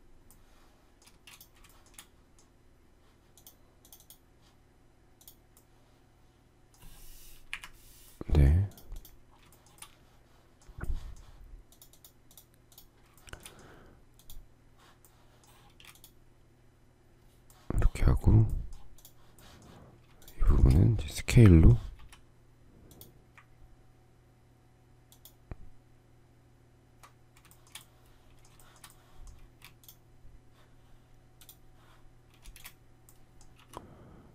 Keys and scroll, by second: 0.5 space, 7.1 Delete, 15.1 space, 21.5 s, 29.1 shift+space, 31.9 space, 33.7 m.